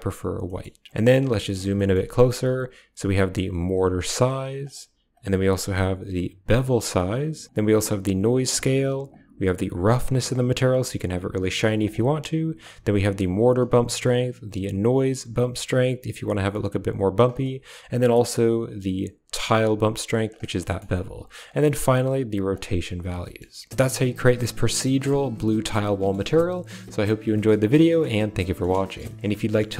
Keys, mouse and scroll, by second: 0.3 click, 1.3 shift+click, 1.7 shift+click, 2.8-4.5 shift+drag, 5.0-6.9 shift+drag, 7.5 shift+click, 8.9-11.7 drag, 12.5-13.5 drag, 13.9-17.1 drag, 18.0-20.2 drag, 20.5 middle click, 21.3-22.4 drag, 23.1 shift+middle drag, 23.6 shift+click, 29.3 ctrl+click.